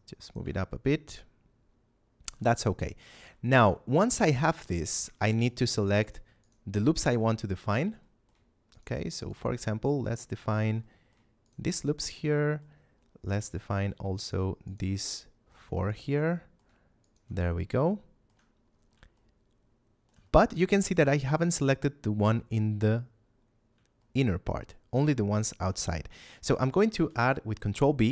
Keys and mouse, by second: 0.2 click, 0.5 shift+middle click, 2.4 middle click, 2.9 a, 3.2 shift+middle click, 3.9 middle click, 4.3 shift+middle click, 4.9 ctrl+Tab, 5.4 click, 5.9 alt+right click, 6.4 alt+shift+right click, 7.0 right click, 8.0 middle click, 8.6 right click, 9.1 right click, 9.4 middle click, 10.4 right click, 10.7 middle click, 11.4 alt+shift+right click, 11.7 shift+middle click, 12.2 middle click, 13.4 shift+middle click, 14.2 alt+shift+right click, 14.6 alt+shift+right click, 15.0 shift+middle click, 15.8 alt+shift+right click, 16.2 shift+middle click, 16.9 alt+shift+right click, 17.4 shift+middle click, 19.1 shift+middle click, 20.2 middle click, 23.9 shift+middle click, 26.4 middle click.